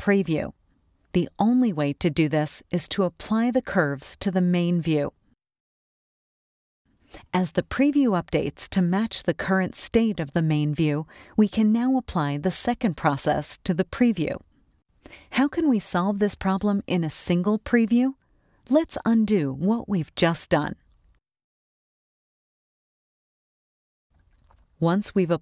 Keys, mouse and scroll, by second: 0.3-5.6 drag, 8.1 click, 13.0-14.2 drag, 17.0 click, 20.6 click, 21.7 click, 23.7 click.